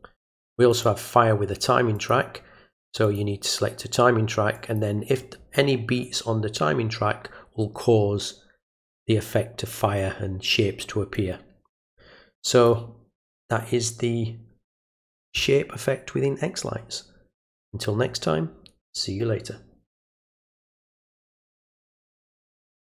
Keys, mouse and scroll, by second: 0.7 click, 1.9 click, 3.0 click, 4.5 click, 11.1-12.6 drag.